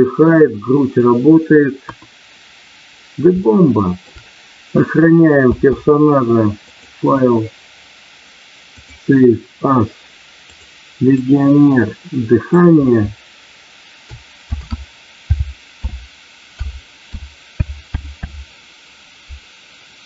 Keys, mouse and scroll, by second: 1.8 KP_1, 3.4 middle click, 5.5 space, 6.7-9.2 drag.